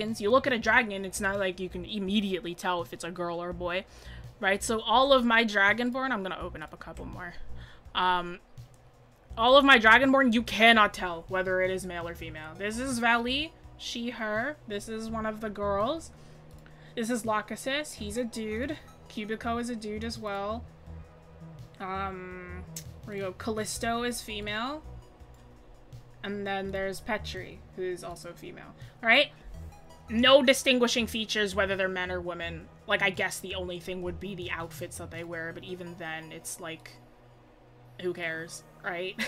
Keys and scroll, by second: 15.1-15.5 scroll up 1, 15.5-15.9 scroll down 1, 24.2-25.1 scroll.